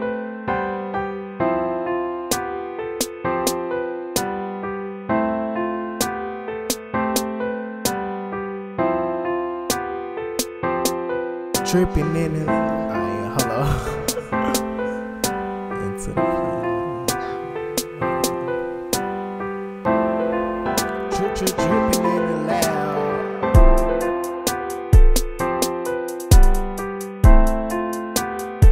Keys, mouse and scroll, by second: 0.0-5.7 typing, 5.1 ctrl++, 6.7 BackSpace, 7.3 ctrl++, 7.5 BackSpace, 8.3 ctrl++, 8.6 BackSpace, 8.9 ctrl+-, 10.1 BackSpace, 10.8 BackSpace, 12.0 ctrl+-, 12.4 ctrl+-, 13.2 ctrl+-, 13.5 ctrl++, 13.9 BackSpace, 14.7 BackSpace, 15.0 ctrl+-, 15.5 ctrl++, 16.0 BackSpace, 16.2 ctrl+-, 16.7 ctrl++, 17.0 BackSpace, 17.3 BackSpace, 19.0 BackSpace, 19.7 ctrl++, 19.9 BackSpace, 20.3 BackSpace, 20.6 BackSpace, 20.9 ctrl+-, 23.0 ctrl+-, 23.5 ctrl++, 24.1 ctrl++, 24.4-27.0 typing, 27.6 ctrl+-, 28.6 ctrl++.